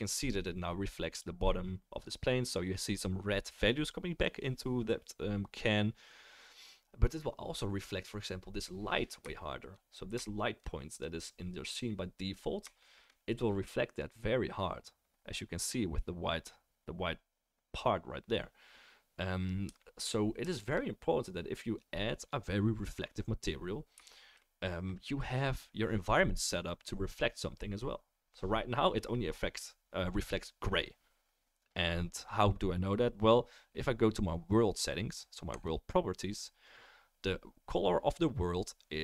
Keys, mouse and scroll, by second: 1.1 click, 1.1 right click, 10.9-11.5 drag, 10.9-11.5 right drag, 35.6-39.0 middle drag.